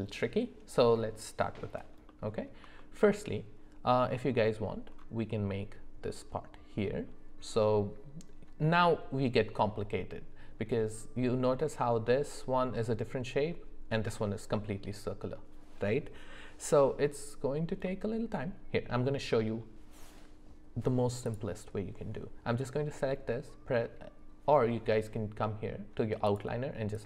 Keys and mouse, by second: 2.1 middle click, 2.7 shift+middle click, 17.8 middle click, 19.4 middle click, 26.3 click, 26.9 click.